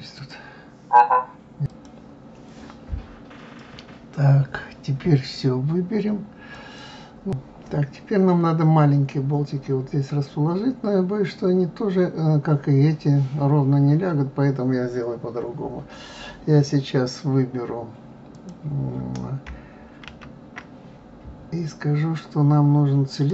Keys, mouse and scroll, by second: 3.1-3.5 scroll up 2, 4.7-6.4 scroll down 1, 6.8 click, 11.4-13.5 scroll down 2, 13.5 scroll down 1, 13.6-16.3 scroll up 2, 16.3-17.2 scroll up 1, 18.3 click, 20.0 shift+a.